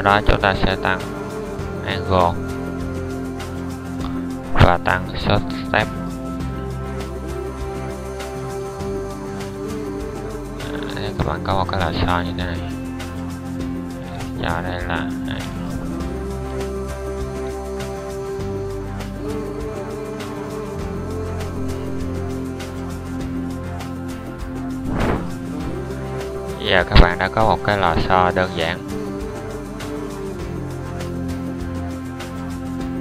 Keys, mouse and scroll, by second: 3.7-5.1 middle drag, 8.4-9.5 middle drag, 11.4-13.0 middle drag, 14.8-18.2 middle drag, 19.7-23.6 drag, 24.9-28.1 shift+scroll, 29.3-31.6 middle drag.